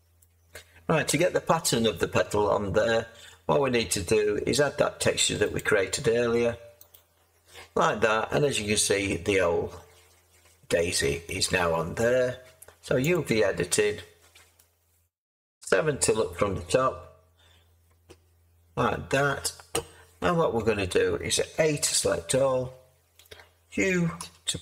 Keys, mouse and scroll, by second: 1.1 7, 15.6 7, 21.8 a, 24.1 u.